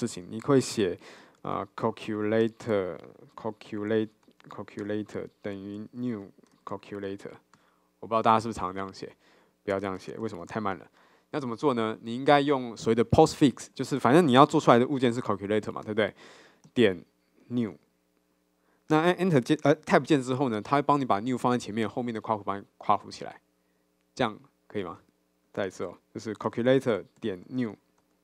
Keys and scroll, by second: 2.4 Return, 16.0 Return, 19.5 Tab, 25.9 super+z.